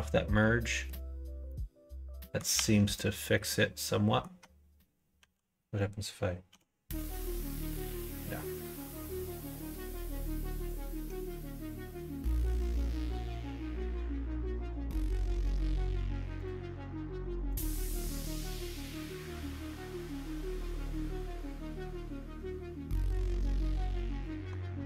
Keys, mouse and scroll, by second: 0.3 middle click, 1.4 middle click, 2.4 Tab, 3.7 middle click, 5.1 l, 6.4 g, 7.9 ctrl+z, 10.9 middle click, 11.2 Tab, 11.7 middle click, 12.4-15.3 middle drag, 16.3-17.6 drag, 20.0 click, 20.4-23.1 middle drag, 24.0 click, 24.5 Tab.